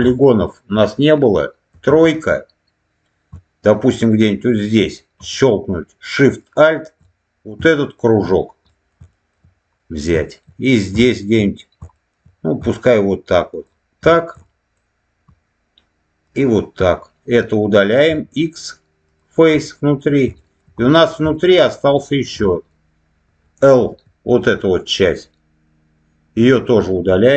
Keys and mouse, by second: 0.0 shift+middle click, 1.6 3, 6.3 alt+shift+click, 7.7 shift+middle click, 8.6 middle click, 9.0 shift+middle click, 9.7 middle click, 10.1 shift+middle click, 10.9 shift+middle click, 11.8 shift+middle click, 13.5 alt+shift+click, 14.3 shift+middle click, 16.1 alt+shift+click, 18.0 x, 19.5 middle click, 20.3 shift+middle click, 20.7 middle click, 21.2 shift+middle click, 22.0 shift+middle click, 22.3 middle click, 23.8 l, 24.3-26.7 middle drag.